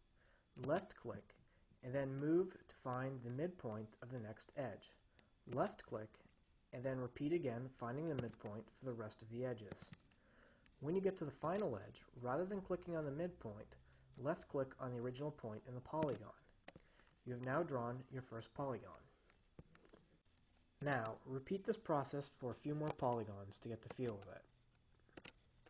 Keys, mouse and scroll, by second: 1.0 click, 4.1-6.5 drag, 7.8-9.2 drag, 10.0 click, 11.8 click, 16.5 click, 21.1 click, 22.6-23.7 drag, 24.2 click, 25.4 click.